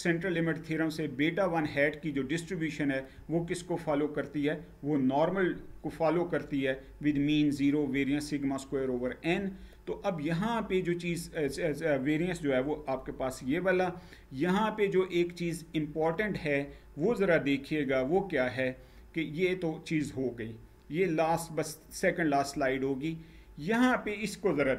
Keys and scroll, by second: 9.0 Page_Down, 17.6 Page_Down, 22.2 Page_Down.